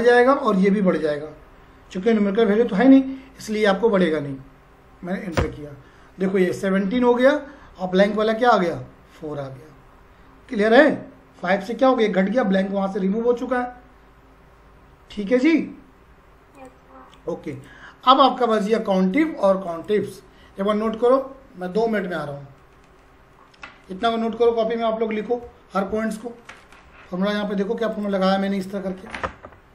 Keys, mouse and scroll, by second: 5.4 Return, 7.4-8.6 scroll up 1, 8.6 click, 16.6 click, 27.9 click.